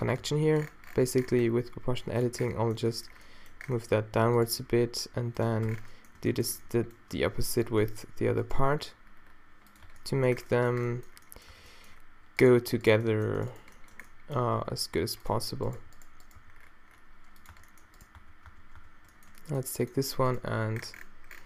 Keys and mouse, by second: 0.0 click, 0.2 click, 0.2 g, 5.7 Tab, 7.2 Tab, 8.6 g, 9.9 Tab, 10.9 click, 11.5 Tab, 14.1 click, 14.4 g, 15.8 g, 16.4 g, 17.5 Tab, 18.2 Tab, 18.5 Tab, 18.9 Tab, 20.4 g.